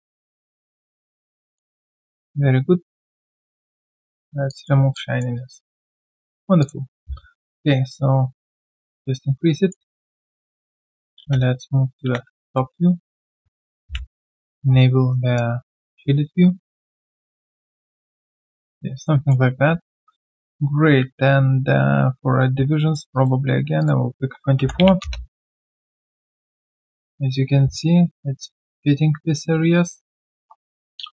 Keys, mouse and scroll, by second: 1.5 alt+click, 1.9 alt+right click, 2.2 alt+click, 3.2 alt+scroll down 1, 3.5 alt+click, 4.9 alt+click, 5.3 alt+right click, 5.7 alt+click, 6.9 typing, 12.7 typing, 13.0 alt+right click, 14.6-15.1 alt+scroll down 1, 15.1 alt+right click, 15.8-16.2 alt+scroll down 1, 16.2 alt+right click, 19.0 alt+middle click, 19.6 w, 24.3-25.3 typing.